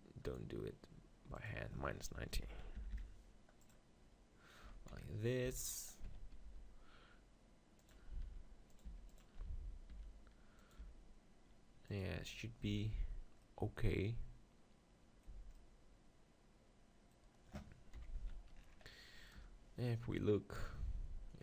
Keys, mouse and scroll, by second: 0.3-3.2 drag, 4.9 KP_7, 5.4 z, 6.1 z, 6.4 g, 7.9-12.6 drag, 8.3 r, 8.9 g, 10.0 r, 10.8 g, 12.6 z, 15.3 z, 15.5 click, 17.9 KP_7, 18.1 z, 19.3 KP_0.